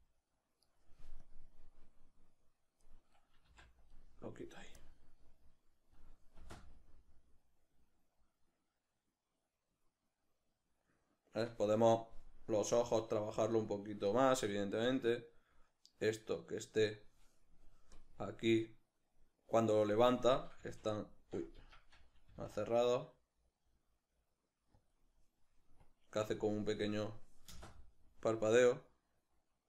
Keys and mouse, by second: 0.8 right click, 1.2-3.2 drag, 3.2 right click, 3.4 x, 4.8-12.8 drag, 11.8 Escape, 12.8 right click, 14.9-24.9 drag, 20.6 f, 21.7 Escape, 22.3 g, 24.8 g, 25.8-29.6 drag, 27.5 space.